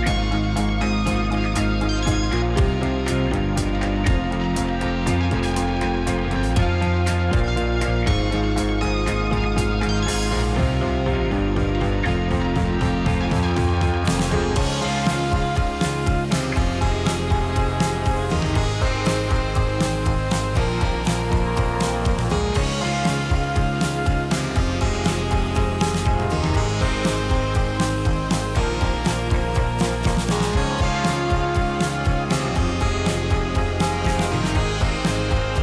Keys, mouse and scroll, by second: 0.2 Tab, 0.5 middle click, 0.9-1.5 right drag, 1.5 drag, 1.6-4.8 middle drag, 4.8 scroll down 2, 5.1-5.5 middle drag, 6.3 click, 9.7 click, 10.0 click, 10.7-12.5 middle drag, 12.5 shift+a, 19.5 s, 21.5 g, 28.2 s, 29.5 g, 31.0 ctrl+r, 34.5 ctrl+r.